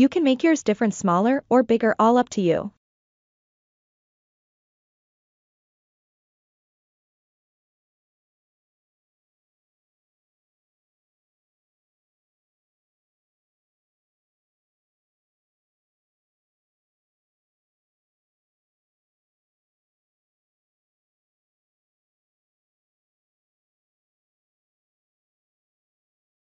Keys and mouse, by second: 0.2 click, 0.6 ctrl+z, 0.7 click, 0.9 middle click, 1.3 click, 1.7 KP_1, 1.9-3.0 drag, 3.4 click, 3.7 click, 4.2 click, 4.4 click, 5.1 click, 5.3 click, 5.5 click, 5.7 click, 6.2 click, 6.4 click, 7.1 click, 7.4 click, 8.1 click, 8.4 middle click, 8.8 middle click, 9.9 middle click, 10.0 KP_1, 10.3 click, 10.6 shift+click, 11.1 click, 11.8 ctrl+KP_Subtract, 12.1 click, 12.4 middle click, 12.6 click, 12.8 middle click, 12.9 click, 13.4 middle click, 13.8 click, 14.1 shift+click, 14.4 click, 14.7 middle click, 14.9 alt+z, 15.1-16.1 middle drag, 16.5 alt+z, 16.9 click, 17.4 shift+click, 17.6 middle click, 18.5 click, 18.8 middle click, 19.3 alt+z, 19.5 ctrl+middle click, 20.0 click, 20.2 KP_1, 20.8 click, 21.0 click, 21.2 click, 21.7 alt+z, 21.8 click, 22.0 click, 22.6 click, 22.8 click, 23.9 click, 24.1 click, 24.8 alt+z, 25.7 middle click.